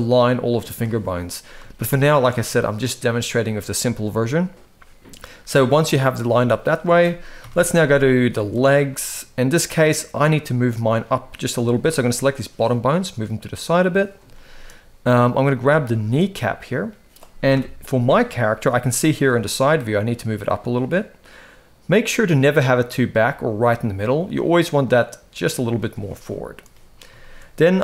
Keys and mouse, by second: 1.5-1.9 shift+middle drag, 3.5 shift+middle click, 6.1 shift+middle click, 7.1 KP_1, 7.8-8.2 shift+middle drag, 8.6-8.9 shift+middle drag, 9.5 click, 10.4 shift+middle click, 11.3 g, 14.1 shift+middle click, 15.6-15.9 shift+middle drag, 17.3 KP_3, 18.2 shift+middle drag, 18.9 g, 26.0 shift+middle drag, 26.9 shift+middle drag.